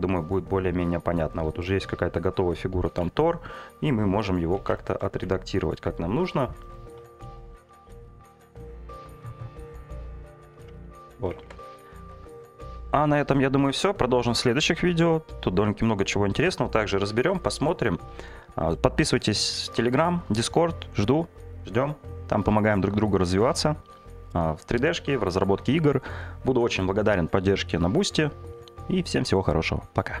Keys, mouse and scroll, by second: 0.8 click, 2.2 click, 2.7 g, 2.9 z, 4.3 click, 4.6 ctrl+z, 7.3 click, 7.8 shift+click, 8.2 shift+click, 9.0 g, 10.6 click, 10.9 ctrl+z, 11.4 Tab, 12.2 Delete, 12.7 middle drag, 13.2 shift+a, 19.5 shift+middle drag.